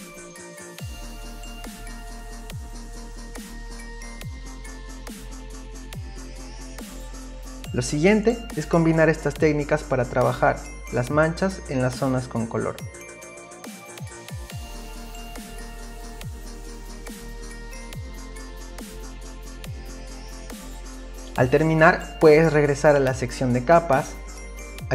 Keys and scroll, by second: 7.3-11.3 space, 16.1 ctrl+z, 17.4 space, 18.2 i, 19.6 ctrl+d, 19.9 space, 20.9 Return.